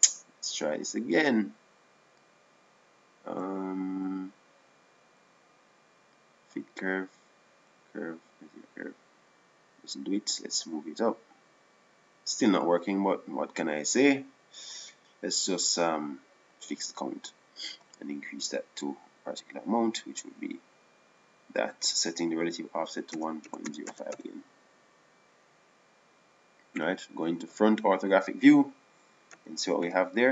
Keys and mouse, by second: 0.5 click, 2.7 click, 4.9-8.0 drag, 8.2 click, 9.3-11.3 drag, 13.4 click, 17.3-19.2 drag, 19.4-21.2 drag, 23.7-26.8 drag, 29.2 KP_1.